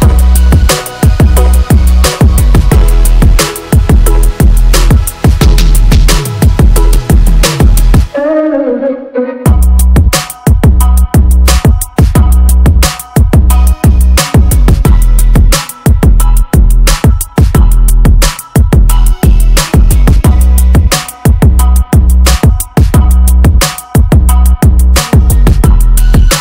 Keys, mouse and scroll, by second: 4.8 n, 7.1 n, 10.7 t, 12.3 t.